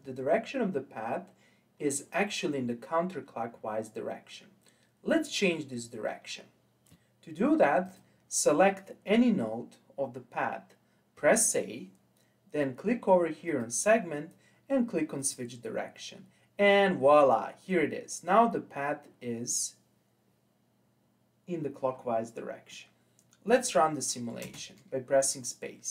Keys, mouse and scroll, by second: 5.9-7.9 scroll up 1, 7.9-10.9 drag, 11.2 a, 13.5-16.5 drag, 21.2 scroll down 2, 22.0-22.7 scroll down 3, 22.7-24.5 middle drag, 24.5 space, 25.4-25.9 scroll up 4.